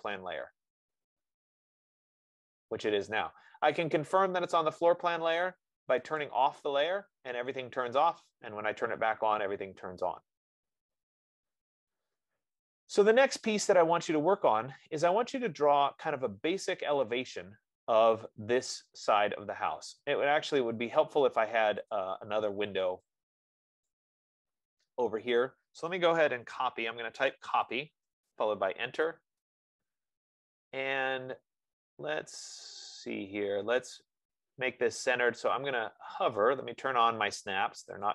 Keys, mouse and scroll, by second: 6.6 click, 7.9 click, 13.5 scroll, 14.5-15.5 scroll, 15.9 scroll, 17.0-17.5 scroll, 20.3 scroll, 21.1 middle click, 22.3 click, 24.1 click, 27.1-29.3 typing, 28.4 Return, 30.9-31.5 scroll, 31.7-32.0 scroll, 33.9-34.5 scroll, 34.8-35.4 scroll, 35.4 scroll.